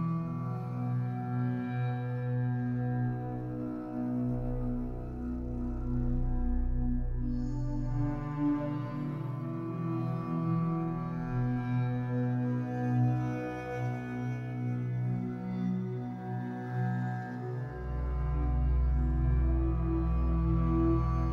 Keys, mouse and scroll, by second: 0.7 Tab, 0.9 scroll down 3, 1.1-3.6 middle drag, 3.6-3.9 scroll up 3, 3.9-6.1 middle drag, 6.1-6.5 scroll down 5, 6.5 ctrl+s, 6.9-7.2 scroll down 1, 7.2-7.8 scroll up 5, 7.8-8.9 middle drag, 8.9 ctrl+s, 10.8-14.6 shift+middle drag, 15.1-18.5 middle drag, 18.5 click, 18.7 g, 19.3 s, 20.5 g.